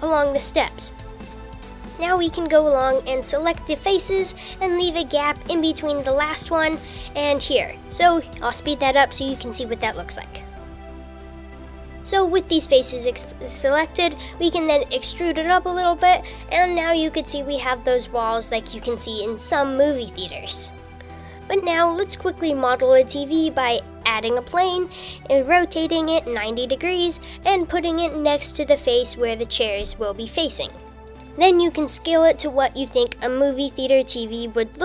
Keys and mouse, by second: 0.2 super+z, 0.2 super+r, 0.8 super+r, 0.9 super+r, 1.2 super+r, 3.0 click, 4.3 shift+click, 4.9 shift+click, 6.0 shift+click, 9.6 shift+click, 10.3 shift+click, 11.2 shift+click, 11.9 e, 23.0 shift+a, 23.6 r, 24.7-27.1 typing, 27.0 super+z, 28.4 super+z, 28.6 u, 28.7 super+z, 28.8 g, 30.2 g, 31.1 s, 32.3-34.4 typing, 32.9 super+z.